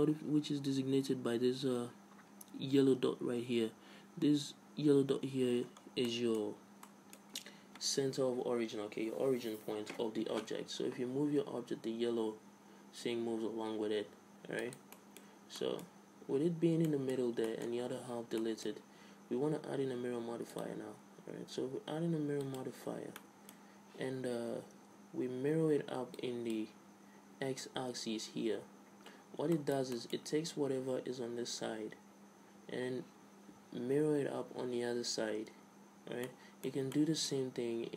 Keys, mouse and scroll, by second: 5.5-6.1 scroll up 1, 6.1-8.6 middle drag, 10.5-13.0 middle drag, 11.4 g, 14.9 middle click, 16.9-20.1 middle drag, 20.5-22.3 drag, 22.9-26.2 middle drag, 27.9 click, 29.5 middle click, 30.4 Tab, 36.3-37.9 middle drag.